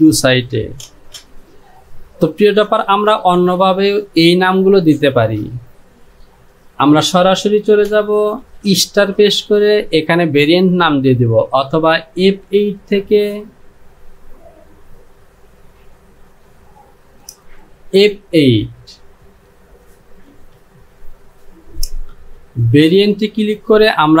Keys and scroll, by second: 8.7 KP_Multiply.